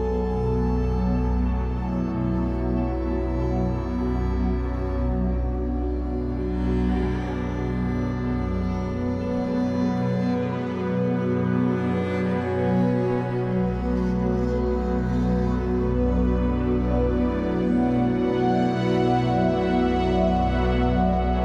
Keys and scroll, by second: 11.0 b, 18.8 Escape, 20.3 3, 21.3 shift+Tab.